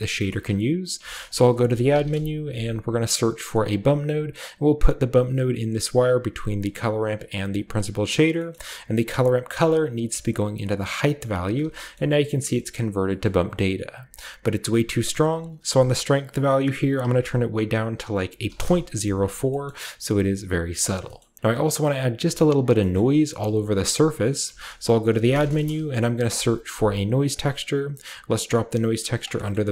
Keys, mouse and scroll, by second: 0.9-2.0 typing, 1.2 shift+middle click, 3.6 click, 7.1 click, 7.5 click, 8.5-9.8 middle drag, 9.6-10.9 drag, 11.9-13.0 shift+middle drag, 11.9-13.0 shift+scroll up 2, 13.2-15.3 shift+middle drag, 13.2-13.8 shift+scroll up 1, 13.8-15.3 scroll up 1, 15.3-17.0 drag, 17.0 typing, 18.2 typing, 18.5 Return, 19.6-21.0 middle drag, 20.6-21.3 scroll down 1, 21.1 middle click, 21.3 typing, 22.9 shift+middle click, 23.4-24.6 shift+middle drag, 24.4-26.7 typing, 24.5-26.2 shift+drag, 29.1-29.7 drag.